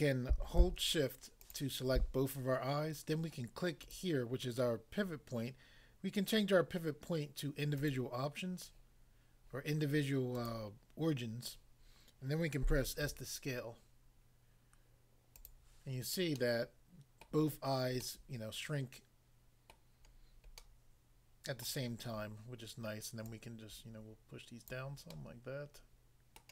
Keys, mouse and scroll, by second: 1.5 shift+click, 3.8 click, 7.8 click, 10.3 click, 11.5 click, 12.9 s, 15.3 click, 16.4 middle click, 17.2 middle click, 18.0 middle click, 19.7 middle click, 20.7 middle click, 21.6 middle click, 23.2 click, 24.7 click, 25.1 middle click, 26.3 middle click.